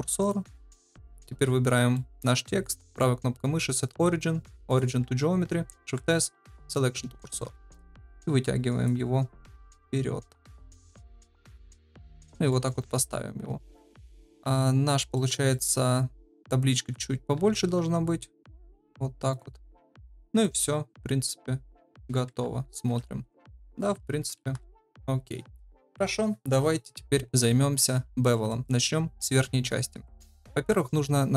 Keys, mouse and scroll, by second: 0.8 click, 1.9 middle drag, 3.0-4.7 right drag, 5.8 shift+s, 7.2 middle drag, 7.9 click, 9.6 KP_1, 10.5 shift+middle drag, 11.4 right click, 12.4 middle drag, 12.6 1, 13.8 click, 15.1 middle drag, 15.5 shift+middle click, 16.8 s, 20.3 click, 20.6-21.7 middle drag, 22.2 KP_0, 23.9 ctrl+s, 28.3 middle drag.